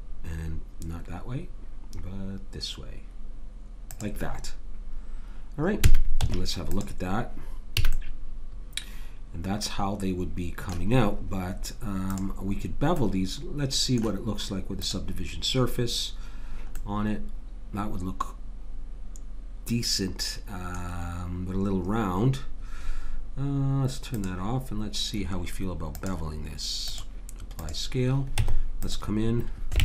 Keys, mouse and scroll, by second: 5.8 a, 6.2 Tab, 7.8 a, 7.9 click, 8.7 middle click, 8.9 click, 8.9 middle click, 11.6-13.8 middle drag, 12.1 click, 13.7 right click, 14.8 click, 24.1-25.3 right drag, 25.9 click, 28.4 Tab.